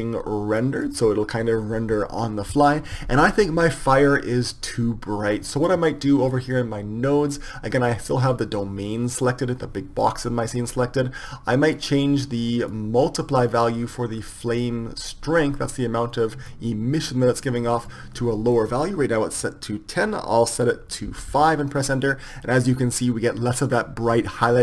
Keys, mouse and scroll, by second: 3.5 middle click, 6.6-9.7 middle drag, 9.7-19.2 drag.